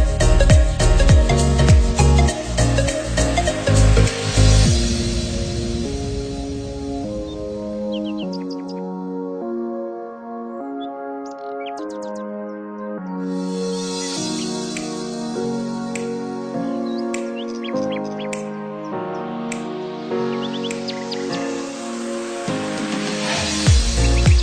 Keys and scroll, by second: 0.9 ctrl+0, 3.3 ctrl+c, 6.2 ctrl+x, 6.6 ctrl+z, 7.5 ctrl+z.